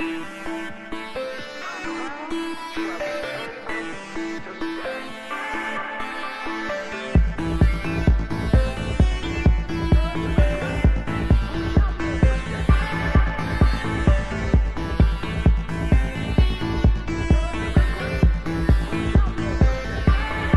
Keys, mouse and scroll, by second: 1.2 f, 2.5 a, 3.0 a, 5.1 t, 8.6-10.4 drag, 10.5-12.4 drag, 15.0-19.6 drag.